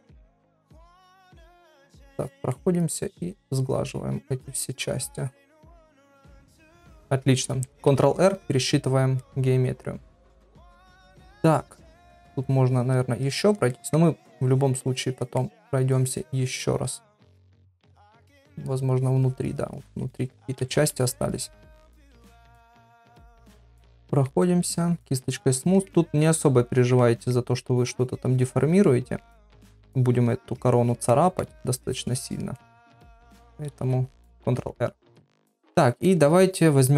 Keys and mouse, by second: 0.1 click, 1.1 click, 1.5 middle click, 2.2 click, 2.5 middle click, 3.2 click, 4.5 click, 4.8 click, 5.6 middle click, 6.3 click, 6.6 ctrl+middle click, 7.0 middle click, 9.5 ctrl+r, 9.5 middle click, 10.5 middle click, 11.5 click, 12.2 click, 12.4 click, 12.7 click, 13.2 click, 13.7 middle click, 14.3 click, 14.9 click, 15.4 middle click, 15.9 click, 17.1 click, 17.8 middle click, 19.0 click, 19.4 click, 19.7 click, 20.6-21.3 [, 21.3 click, 21.7 click, 24.0 middle click, 24.7 click, 24.8 click, 25.9 middle click, 26.7 click, 27.0 middle click, 27.7 click, 28.8 middle click, 29.5 click, 30.6 click, 31.1 middle click, 31.9 click, 32.5 middle click, 35.4 ctrl+r, 36.1 middle click.